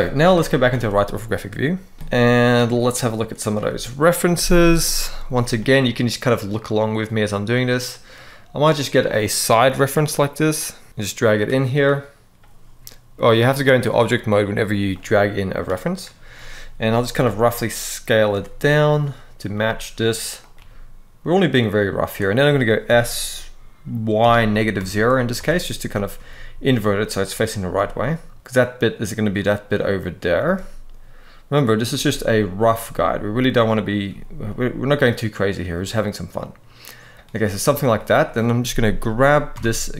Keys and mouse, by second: 0.0 KP_3, 0.4 alt+a, 13.0-13.4 drag, 16.9 s, 18.0 r, 19.1 click, 19.3 s, 20.1 click, 20.2 g, 22.5 s, 23.9 y, 24.3 -, 24.5 1, 25.0 Return, 25.8 r, 27.4 g, 30.1 r, 31.2 click, 31.6 g, 32.3 click, 32.5 s, 33.6 click, 33.8 g, 36.7 shift+click, 37.6 click, 39.3 Tab.